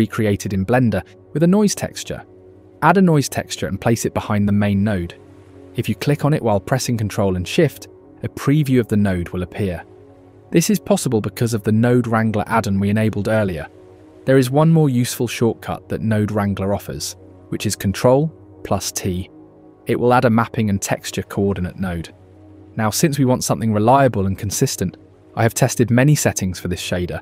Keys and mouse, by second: 0.7 shift+a, 4.7 click, 6.1 click, 8.4 ctrl+shift+click, 17.2 click, 18.3 ctrl+t, 19.7 click, 21.5-22.3 drag, 27.1-27.2 drag.